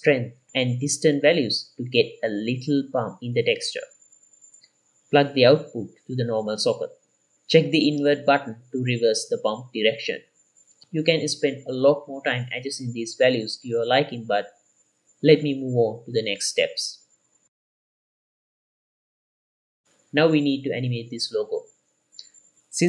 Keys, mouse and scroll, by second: 0.2-2.7 scroll up 3, 2.7 click, 4.0 click, 4.4 middle click, 4.6 scroll down 1, 4.9-6.1 ctrl+shift+drag, 6.5-7.0 middle drag, 6.5-7.0 scroll down 3, 7.2 scroll up 1, 7.4-8.4 middle drag, 8.7 middle click, 9.1 scroll up 2, 9.4-11.0 shift+drag, 11.1-11.5 middle drag, 11.6-12.0 middle drag, 11.6 scroll up 2, 12.3-12.9 middle drag, 12.3 scroll down 2, 13.0 middle drag, 15.4 middle click, 15.4 scroll down 2, 16.1 ctrl+s, 16.1 middle drag, 16.6-17.0 middle drag, 17.5 ctrl+s, 17.8 middle click, 18.0 scroll down 2, 18.2 click, 18.8 middle click, 18.8-19.4 scroll up 2, 19.8 middle click, 21.4 ctrl+s.